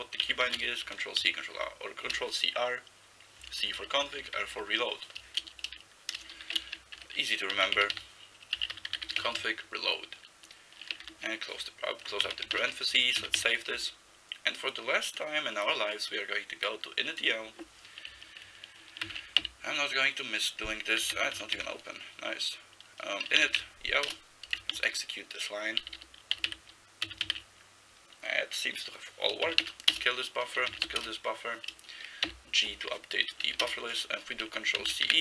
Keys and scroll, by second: 0.0-1.9 typing, 3.6 Left, 3.8 Left, 4.0 Left, 4.2 Right, 4.4 Right, 4.6 Right, 5.5-9.9 typing, 11.1 ), 12.3 ctrl+c, 12.6 ', 13.2 ctrl+x, 13.4 ctrl+s, 19.1 ctrl+x, 19.4 b, 21.2 ctrl+g, 21.4 ctrl+x, 21.6 ctrl+f, 23.0-24.0 typing, 24.1 Return, 24.8 ctrl+n, 25.3 ctrl+n, 25.8 ctrl+n, 26.0 ctrl+n, 26.4 ctrl+n, 26.5 ctrl+e, 27.0 ctrl+x, 27.2 ctrl+e, 29.5 ctrl+x, 29.6 k, 29.9 Return, 30.7 ctrl+x, 30.9 k, 31.1 Return, 32.3 g, 33.5 n, 33.7 Return, 34.8 ctrl+c, 35.1 e.